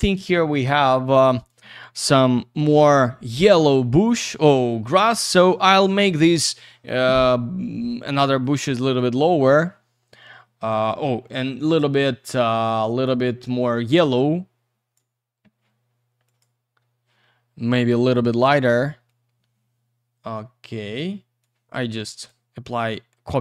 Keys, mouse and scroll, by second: 0.9 click, 8.4 click, 9.2-10.4 scroll down 1, 11.2 middle click, 11.5-12.0 scroll down 1, 12.0 click, 13.3 scroll down 1, 14.0 shift+click, 16.4 click, 19.0 click, 21.4 click, 22.8 click.